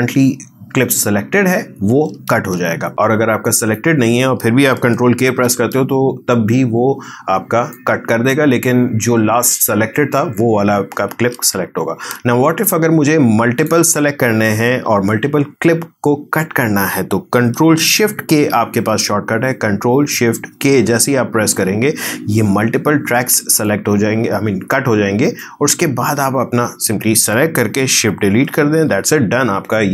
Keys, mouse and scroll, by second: 2.3 ctrl+z, 2.9-5.3 drag, 5.3 ctrl+k, 7.7-11.5 drag, 11.5 ctrl+z, 12.6-20.5 drag, 20.5 ctrl+shift+k, 23.1-28.4 drag, 28.4 shift+Delete.